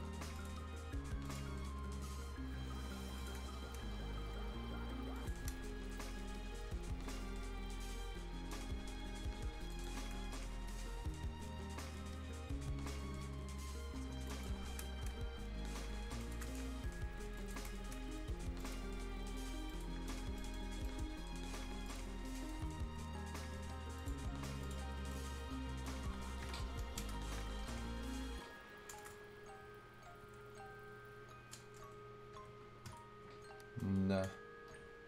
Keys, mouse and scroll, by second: 0.4 ctrl+click, 3.4 shift+click, 3.5-3.8 scroll up 1, 5.2 click, 5.5-5.9 shift+scroll down 1, 5.9-6.7 scroll up 1, 6.7 scroll down 1, 7.0 shift+scroll up 1, 9.2 shift+scroll up 1, 9.7 shift+click, 10.0 shift+scroll down 1, 10.4 scroll up 1, 11.0-11.7 scroll up 1, 11.7 scroll down 1, 12.0 scroll up 2, 14.3 shift+click, 18.6 shift+click, 20.1 shift+scroll up 1, 20.2 scroll down 1, 20.4 right click, 20.7 scroll up 1, 20.8 right click, 21.9 click, 22.1 scroll up 1, 22.4 right click, 22.5 scroll down 1, 24.0 click, 24.9 scroll down 1, 25.1 right click, 25.1 right click, 25.4-26.0 scroll up 1, 29.0 BackSpace, 31.8 BackSpace.